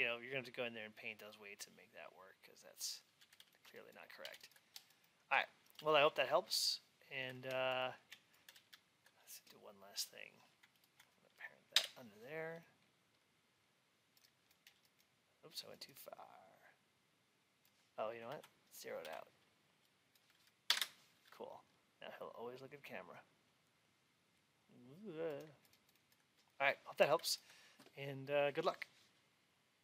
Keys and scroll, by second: 4.1 alt+x, 18.2 ctrl+a, 20.6 Return.